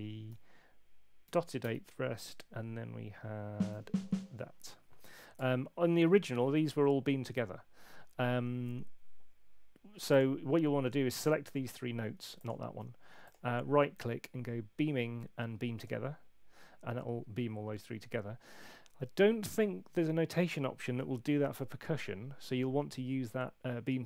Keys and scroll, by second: 0.2 5, 1.2 ., 1.6 space, 2.2 4, 3.7 5.